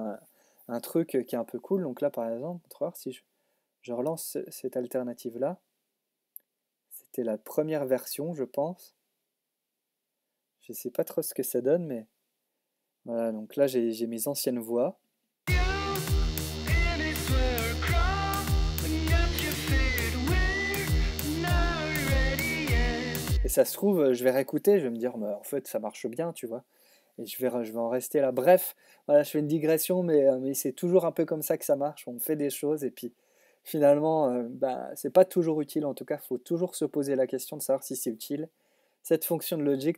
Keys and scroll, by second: 23.1 space.